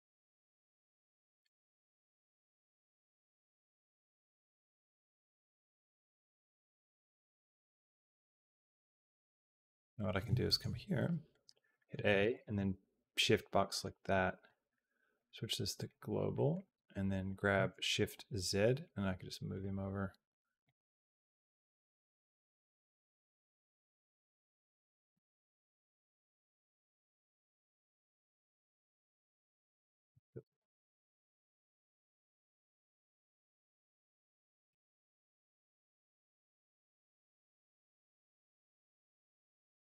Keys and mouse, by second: 2.0 middle click, 2.9 click, 3.2 x, 4.3-9.9 drag, 10.3 shift+click, 10.8 click, 11.3 a, 11.6 shift+click, 11.9 b, 13.5 shift+click, 14.0 click, 15.0 click, 16.2 middle click, 16.4 g, 20.5-24.6 drag, 25.0 g, 26.9-33.9 drag, 34.4 g, 36.4-40.0 drag.